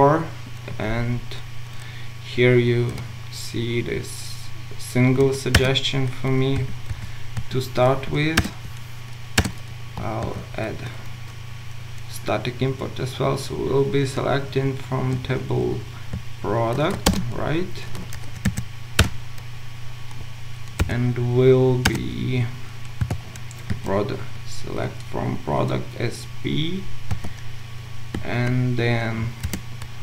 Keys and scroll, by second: 5.7 Return, 8.4 Return, 17.4 ctrl+shift+space, 19.0 Return, 28.2 Tab.